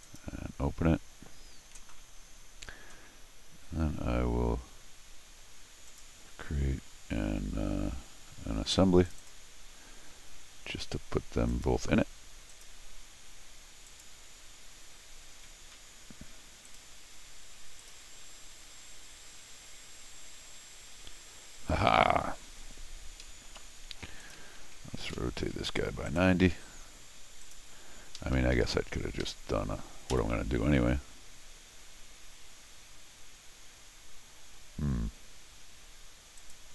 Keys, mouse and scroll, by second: 0.0 click, 5.9 click, 9.0 click, 9.2 click, 11.5 click, 12.5 click, 13.9 click, 15.7 i, 16.6 click, 17.8 click, 21.5 click, 22.6 scroll down 4, 23.2 Escape, 24.2 click, 25.0 alt+shift+r, 26.0 right click, 27.4 click, 28.1 Escape, 28.3 Escape, 28.5 Escape, 28.6-29.2 scroll up 2, 29.2 Escape, 30.1 m, 36.4 click.